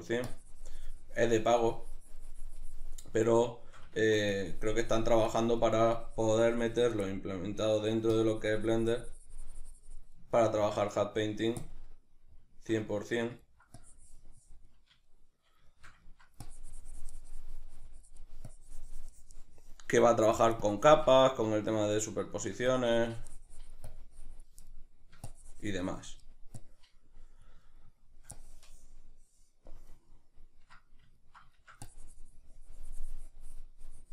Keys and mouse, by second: 0.3-3.6 drag, 3.6 shift+middle click, 4.4-7.4 drag, 7.4 middle click, 8.2-10.4 drag, 10.4-11.8 ctrl+middle drag, 11.8 click, 12.6-13.8 ctrl+shift+middle drag, 13.8-15.2 drag, 15.2-16.5 shift+middle drag, 16.5-21.5 drag, 21.5-22.7 shift+middle drag, 22.7-24.7 drag, 24.7 shift+middle click, 25.3-27.7 drag, 27.7 shift+middle click, 28.4-30.1 drag, 30.1-32.0 ctrl+middle drag, 32.0-34.1 drag.